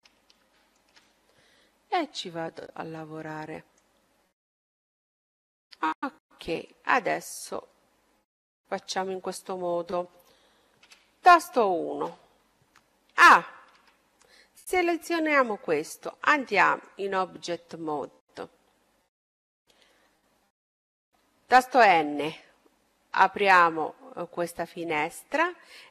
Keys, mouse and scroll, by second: 2.0-3.9 drag, 4.2 middle click, 5.6-7.3 middle drag, 7.4-9.1 middle drag, 9.1-10.6 scroll up 1, 10.6 scroll up 1, 10.7 KP_1, 13.1 a, 13.7 a, 16.0-19.9 drag, 16.8 a, 19.3-24.4 middle drag.